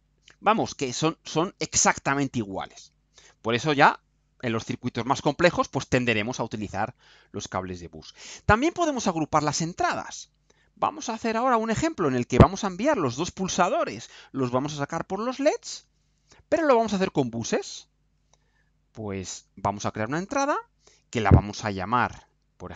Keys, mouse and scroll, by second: 7.9 right click, 11.1-11.8 drag, 12.5 Delete, 19.7 click, 22.2 click.